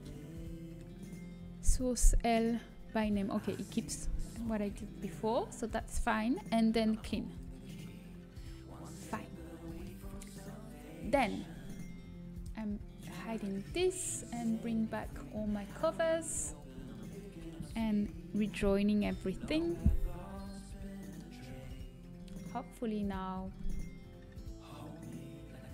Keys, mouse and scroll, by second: 2.4-5.5 scroll up 1, 8.2-9.5 drag, 9.5 middle click, 10.0 Tab, 12.4-14.8 drag, 13.1-15.1 middle drag, 13.1-14.8 right drag, 15.1-18.8 drag, 20.2 ctrl+j, 21.4 Tab, 22.1 a.